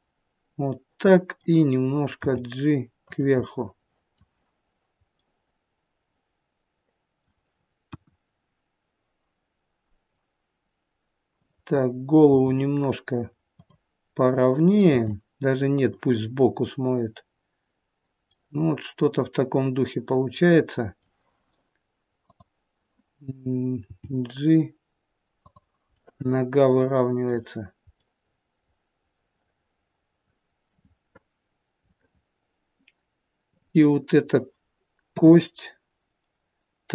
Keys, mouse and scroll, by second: 2.2 g, 3.3 middle click, 5.3 middle click, 8.0 KP_1, 11.3 click, 12.2 r, 14.8 r, 18.2 middle click, 22.2 click, 23.8 g, 25.9 middle click, 28.0 middle click, 33.4 click, 35.0 KP_7.